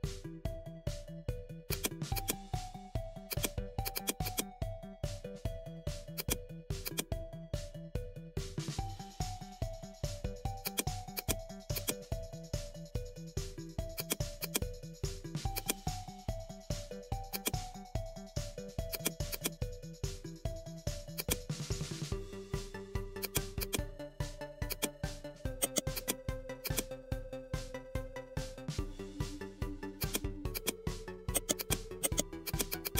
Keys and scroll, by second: 3.1 ctrl+g.